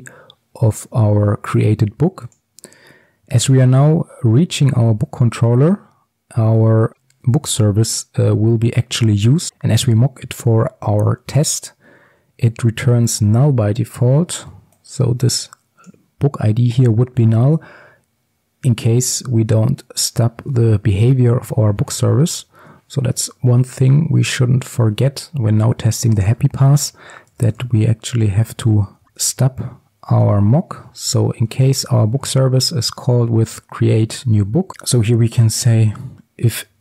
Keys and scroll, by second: 6.9 ctrl+b, 21.3 ctrl+alt+Left, 29.2 Return, 34.7 ctrl+z.